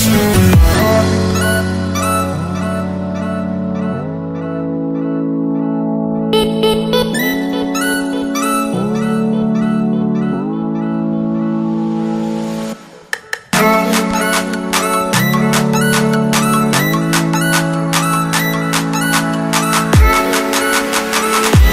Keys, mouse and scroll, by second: 0.6 Return, 0.8 click, 0.9 scroll down 1, 1.1 click, 1.8 click, 2.7 Return, 2.8 click, 3.2 Delete, 3.6 click, 4.4 Return, 4.9 scroll down 1, 5.6 click, 6.2 ctrl+c, 6.4 Tab, 6.5 click, 7.8-8.7 typing, 8.7 click, 13.6-14.7 typing, 15.4 click, 16.8 Tab, 17.1 click, 17.5 c, 17.5 Tab, 17.8 ctrl+v, 18.1 click, 21.5 click.